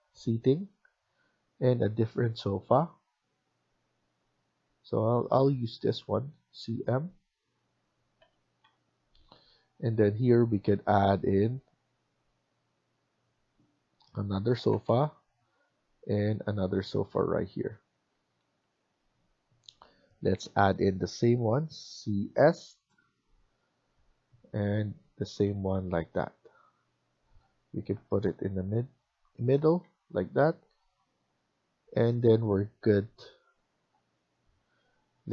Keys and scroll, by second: 18.0 Escape, 18.3 Escape, 21.7-22.3 typing, 25.3 Escape, 25.7 Escape, 29.5 Escape, 29.7 Escape.